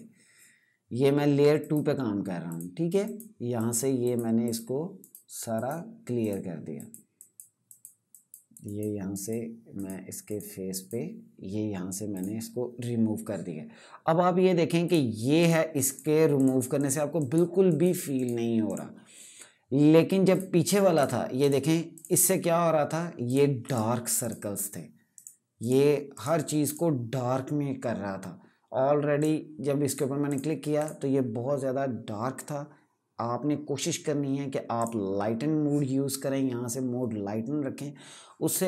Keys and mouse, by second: 14.5 click, 28.9 click, 34.5 click.